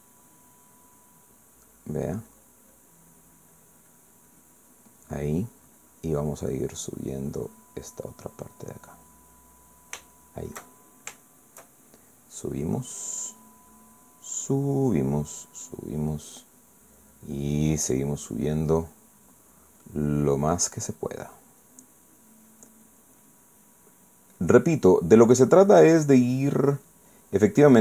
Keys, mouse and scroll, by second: 0.4 click, 1.5 click, 2.3 click, 2.8 click, 3.3 click, 5.0 click, 5.7 click, 6.8-8.7 drag, 8.8-10.3 drag, 10.3-12.7 middle drag, 13.3 click, 15.0 click, 16.3 click, 17.2 click, 18.0 click, 18.6 click, 19.2 click, 20.8 click, 21.8 click, 22.6 click, 23.5 click, 24.2 click, 25.4 click, 27.5 click.